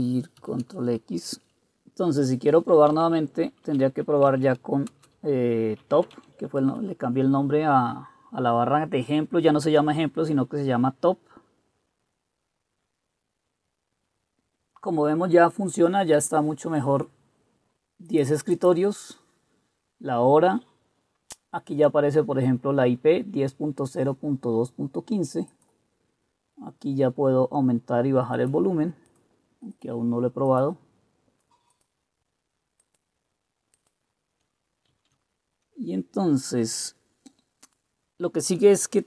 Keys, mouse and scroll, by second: 0.5 ctrl+x, 2.6-6.8 typing, 4.4 Tab, 30.3-37.6 drag, 35.0 ctrl+c.